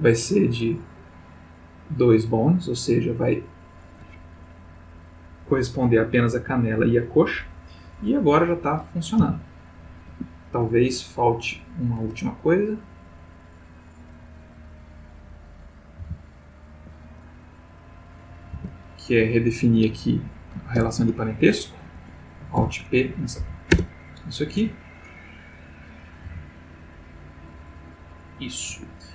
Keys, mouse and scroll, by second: 1.0 click, 1.6 click, 8.5 click, 9.2 g, 10.1 Escape, 11.2 click, 14.7 click, 16.0 alt+g, 17.9 click, 18.5 Tab, 20.7 ctrl+p, 21.9 Escape, 22.5 alt+p, 23.4 Down, 23.7 Return, 24.7 Tab, 25.5 click, 26.2 g, 28.7 Escape.